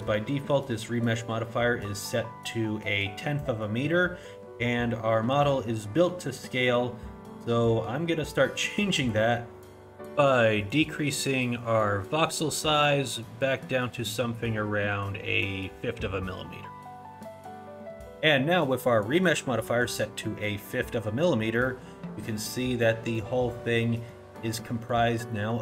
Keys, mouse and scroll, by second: 8.3 click, 21.7 middle click, 23.2 middle click, 23.8 middle click, 24.6 middle click, 25.3 middle click.